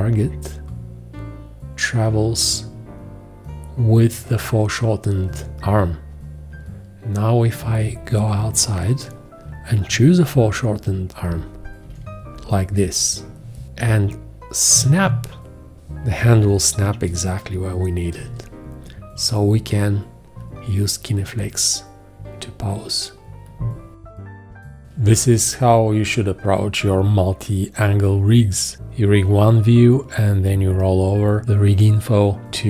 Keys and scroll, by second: 11.2 shift+., 14.7 ', 18.2 g, 24.9 space.